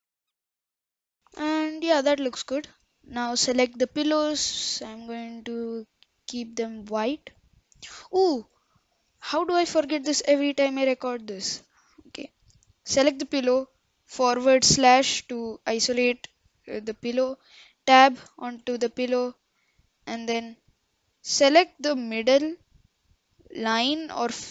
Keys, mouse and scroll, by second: 0.1 middle click, 0.4 click, 1.0 middle click, 1.1 KP_0, 1.3-2.6 scroll up 7, 2.6 scroll down 2, 3.5 click, 5.1-7.2 drag, 8.3-8.8 middle drag, 8.8-9.5 scroll up 1, 9.5 KP_Decimal, 10.2-10.9 middle drag, 10.9-11.9 scroll up 3, 11.9-14.8 middle drag, 14.8 KP_Divide, 15.4-15.8 scroll up 5, 15.8-16.4 middle drag, 16.4-16.9 scroll down 3, 16.9-18.1 scroll up 2, 18.1 Tab, 18.2 Tab, 18.7 Tab, 18.8-20.1 middle drag, 20.1-20.7 scroll up 1, 20.7 middle click, 21.1-21.7 scroll up 1, 21.7 middle click, 22.1-23.5 scroll down 1, 23.5-24.0 scroll down 1, 24.0 2.